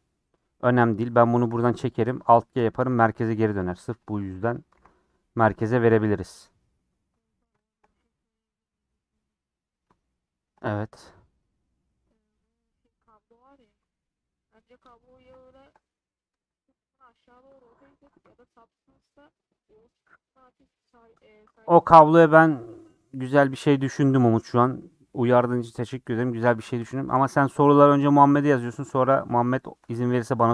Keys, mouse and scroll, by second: 0.8 scroll down 3, 1.3 click, 1.4 g, 2.3 alt+space, 2.7 alt+g, 3.2 click, 3.7 g, 4.7 alt+g, 5.8 scroll up 3, 6.4 scroll down 3, 6.5 middle click, 6.8-7.1 scroll up 4, 7.1-12.4 middle drag, 12.4-13.0 scroll up 3, 13.0 middle click, 13.7 scroll up 3, 14.8 scroll down 6, 15.3-17.0 shift+middle drag, 17.0 scroll up 1, 26.9-28.9 shift+middle drag, 28.9 scroll up 3, 29.1 middle click, 30.0 3.